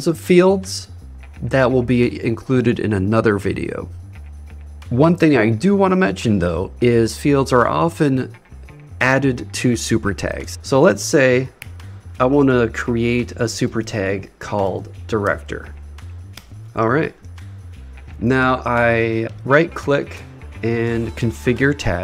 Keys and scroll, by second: 11.6 shift+3, 16.5 super+Return.